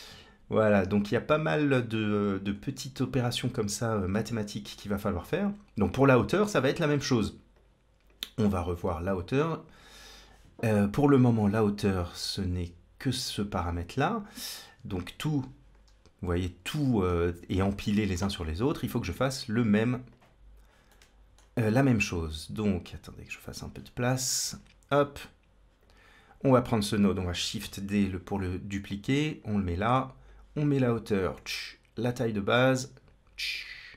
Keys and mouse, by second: 2.9-4.4 drag, 5.8-7.0 drag, 7.5 click, 8.5-10.1 drag, 15.2 z, 16.5 z, 19.1-19.5 drag, 19.9 click, 20.8 middle click, 23.6 click, 24.7-25.8 drag, 26.3 click, 27.5 shift+d, 30.1-31.2 drag, 31.8-33.4 drag.